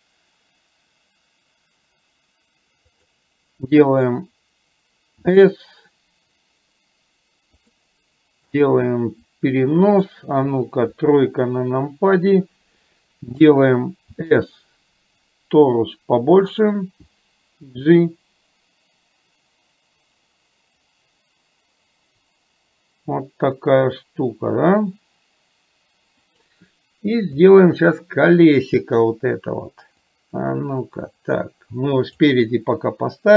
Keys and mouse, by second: 8.6-10.1 drag, 11.0 KP_3, 14.6 s, 27.6-29.0 middle drag, 30.1-32.4 drag.